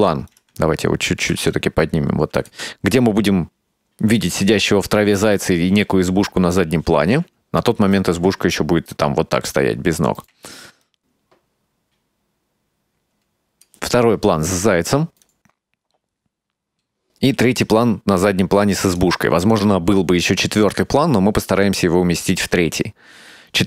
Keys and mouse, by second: 0.4 right click, 1.3 g, 7.7 right click, 8.2 g, 10.9-13.8 drag, 15.3-19.1 drag.